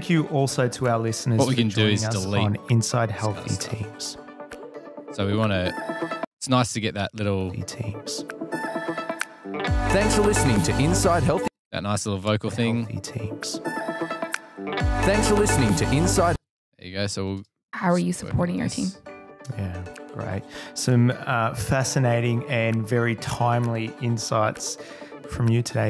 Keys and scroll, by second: 1.1 Delete, 2.9 f, 4.0 F8, 5.7 space, 5.8 F7, 6.8 space, 16.9 space, 17.1 space, 18.9 F8.